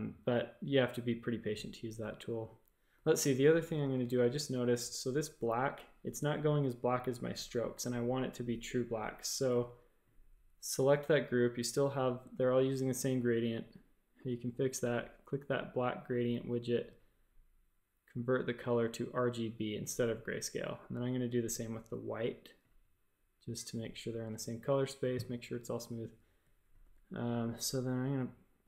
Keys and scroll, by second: 2.9-3.5 typing, 4.0 shift+super+a, 9.4 v, 26.2 v, 26.8 a, 27.2 g.